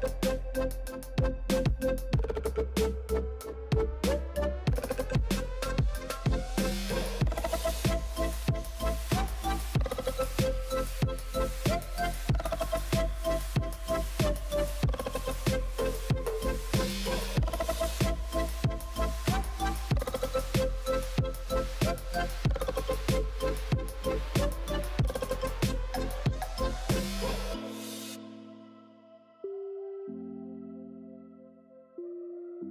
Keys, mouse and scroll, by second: 0.0-0.5 scroll up 1, 0.5 2, 0.9 alt+click, 1.7 alt+click, 2.2 f, 2.5 scroll down 1, 2.7 click, 2.9 Tab, 3.1 click, 3.4-3.7 scroll down 4, 3.7-6.0 drag, 3.7 middle click, 4.3 middle click, 5.5 shift+middle click, 6.5 middle click, 7.2 Tab, 7.8 l, 8.3 shift+d, 9.4 ctrl+z, 10.0 l, 10.2-10.6 middle drag, 10.6 l, 10.8 middle click, 11.5 shift+d, 12.8 s, 16.0 shift+middle click, 16.7-18.1 scroll up 2, 18.1 shift+middle click, 18.5 scroll up 1, 18.7 middle click, 19.6 scroll down 1, 19.8-20.9 shift+middle drag, 20.9 KP_3, 21.3 shift+middle click, 21.5-22.1 scroll up 6, 21.7 shift+middle click, 22.1 alt+z, 22.4 click, 23.3 shift+click, 24.1 x, 24.9 click, 25.5 g, 27.9-28.4 shift+middle drag, 28.4 click, 28.8 shift+middle click, 29.3 shift+click, 29.9 x, 30.7 click, 31.2 g.